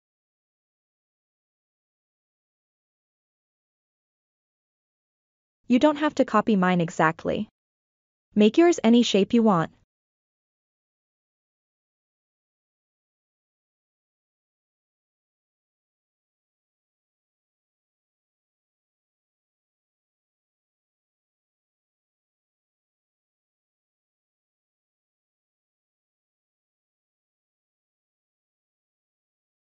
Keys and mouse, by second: 2.2 e, 3.9 e, 8.6 e, 11.4 e, 13.2 e, 16.1 e, 18.1 e, 22.9-24.7 drag, 26.3 e.